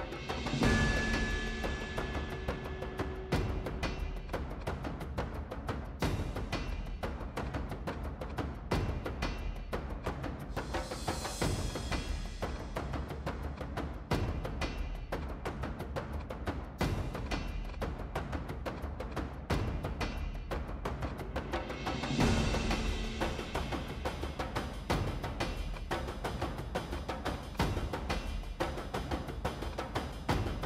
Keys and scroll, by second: 4.6-5.5 typing, 8.5 0, 8.8 Return, 18.3 Escape.